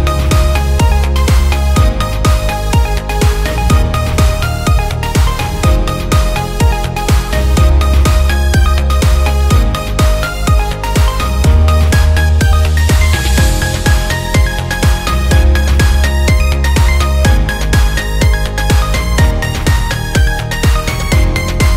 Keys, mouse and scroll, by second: 1.2 space, 2.1 space, 2.6 click, 3.2 click, 3.8 click, 4.5 shift+d, 7.0 click, 8.0 space, 10.4 space, 11.1 click, 13.0 space, 18.8 space, 19.6-21.7 drag.